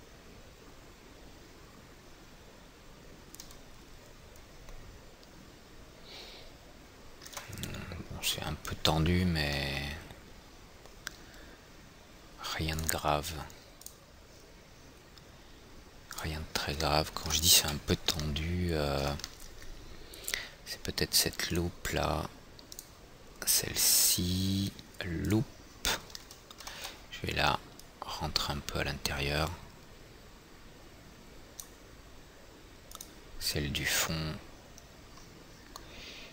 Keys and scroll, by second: 18.2 F4, 27.5 w.